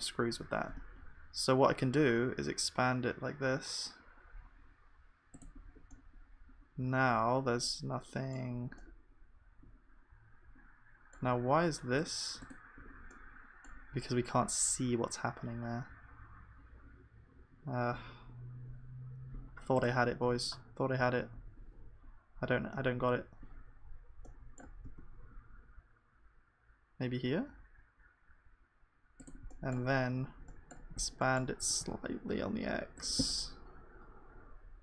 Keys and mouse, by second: 7.3 middle click, 7.6-34.8 middle drag.